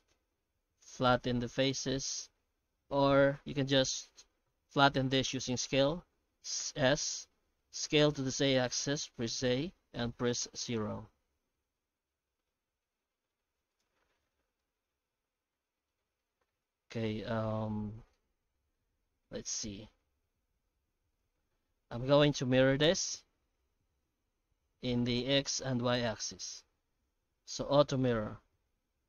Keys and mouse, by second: 0.2 q, 2.8 ctrl+z, 6.6 s, 11.2 Tab, 11.6 Tab, 11.9 s, 13.8 Tab, 14.6-15.9 middle drag, 16.5 Tab, 16.7 middle click, 17.2-18.5 shift+middle drag, 19.2 ctrl+r, 21.7 shift+middle click, 22.9-25.1 middle drag, 25.9 Tab, 26.3 shift+q.